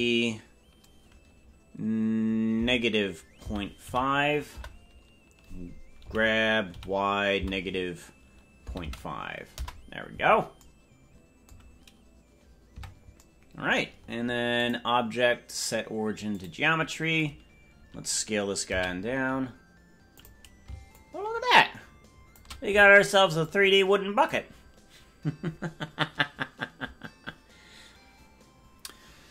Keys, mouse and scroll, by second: 10.5 g, 12.7 Tab, 14.5-16.4 drag, 18.6 s, 20.9-22.4 shift+drag, 23.4 click.